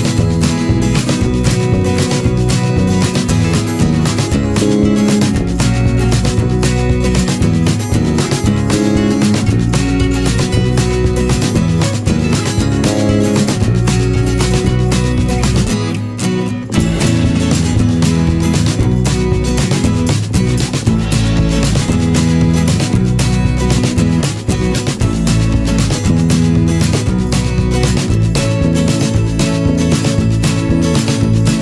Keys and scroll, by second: 15.6 ctrl+=, 16.0 ctrl+space.